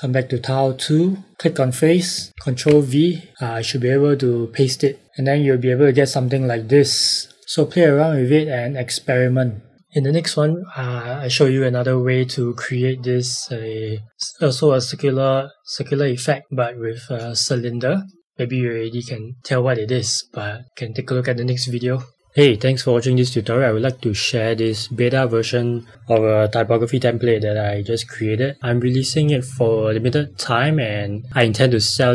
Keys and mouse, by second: 2.3 ctrl+v, 4.8 click.